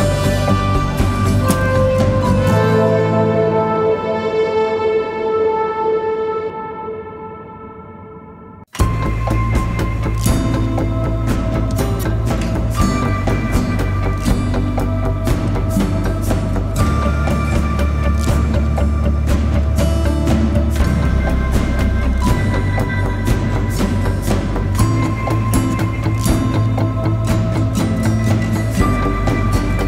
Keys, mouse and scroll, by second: 3.2 double click, 5.2-5.9 typing, 7.1-7.9 typing, 8.3 ctrl+=, 8.5 ctrl+=, 11.9 double click, 16.8 click, 17.0 ctrl+-, 17.9 ctrl+-, 23.8 right click, 26.0 shift+click.